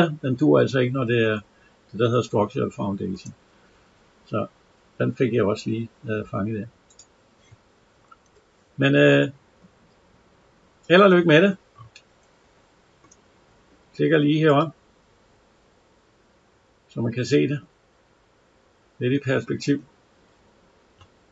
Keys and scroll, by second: 8.1 Escape.